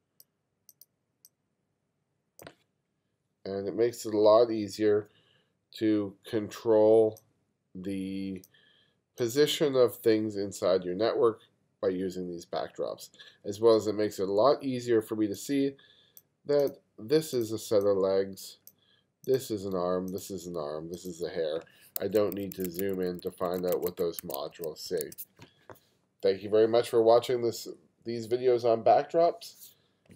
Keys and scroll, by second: 22.1 2, 24.2 1.